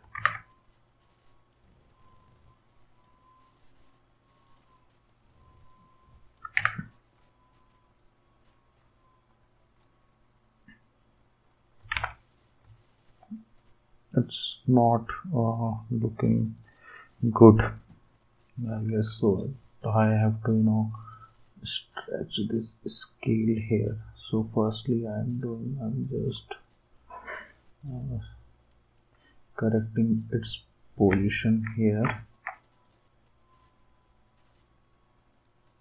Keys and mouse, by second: 0.2 ctrl+z, 6.5 ctrl+z, 11.9 alt+Tab, 17.6 click, 19.3-20.3 drag, 20.9-21.9 drag.